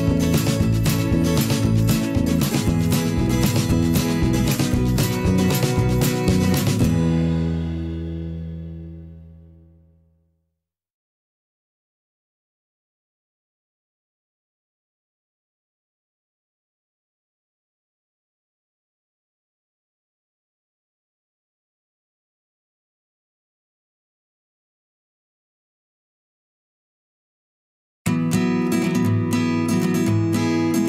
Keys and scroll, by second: 20.5 ctrl+o.